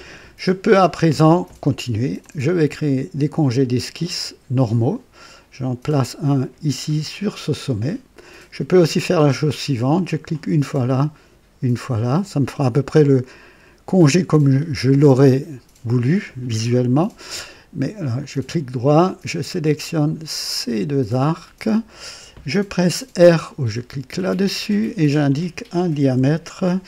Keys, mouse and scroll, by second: 2.1 click, 6.9 click, 10.2 click, 11.9 click, 18.1 right click, 19.3 click, 21.0 click, 24.2 r, 26.1 KP_1.